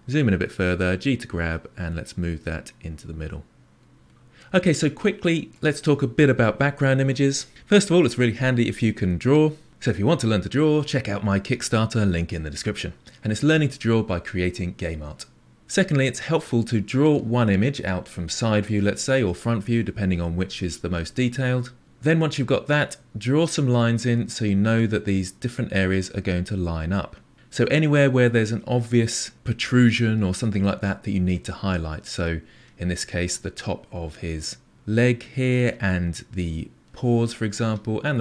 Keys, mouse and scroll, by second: 0.7 g, 3.9-4.7 scroll down 6, 4.8-7.5 shift+middle drag.